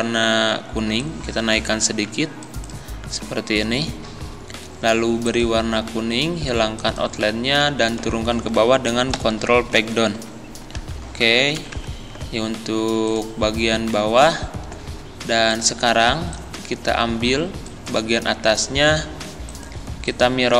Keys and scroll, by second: 9.1 ctrl+Page_Down, 10.1 Down, 10.9 Up.